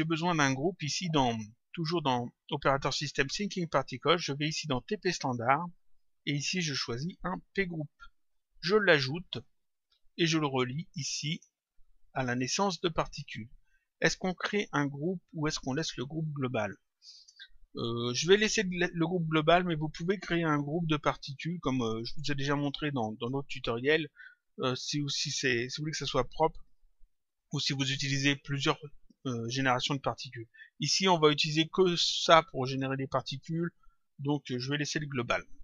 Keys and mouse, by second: 5.5 click, 7.2 click, 11.2 click, 14.4 click.